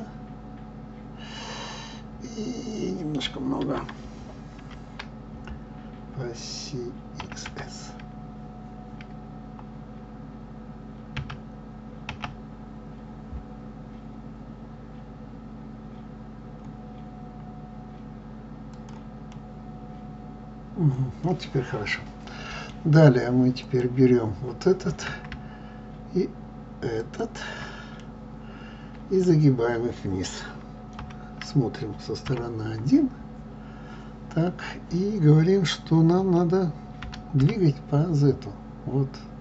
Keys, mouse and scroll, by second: 19.3-22.3 middle drag, 23.5 click, 27.0 shift+click, 28.0-30.9 middle drag, 30.9 KP_3, 32.7-33.1 scroll up 1, 33.5 scroll down 2, 37.0 g.